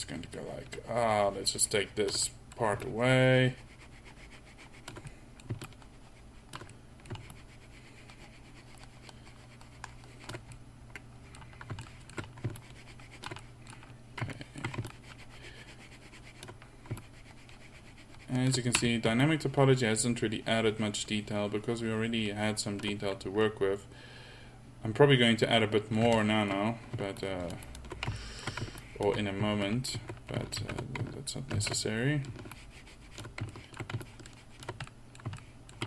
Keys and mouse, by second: 2.4 click, 5.1 middle click, 6.8 click, 7.0 middle click, 7.2-9.7 drag, 10.7 click, 11.0-11.4 drag, 11.9 drag, 12.4 drag, 12.6-13.7 middle drag, 19.2-20.9 drag, 23.1 middle click, 26.2-27.2 middle drag, 28.2 middle drag, 30.1 middle click, 31.2 ctrl+z, 32.1 ctrl+z, 35.7 middle click.